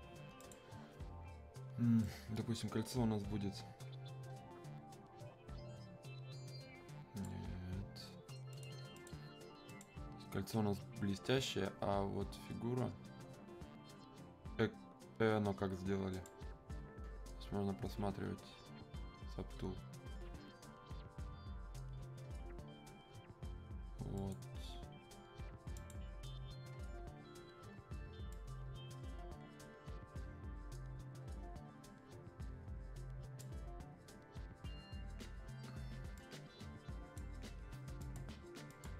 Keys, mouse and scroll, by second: 16.1 click, 24.2 click, 28.3-35.9 drag, 36.2-38.0 drag.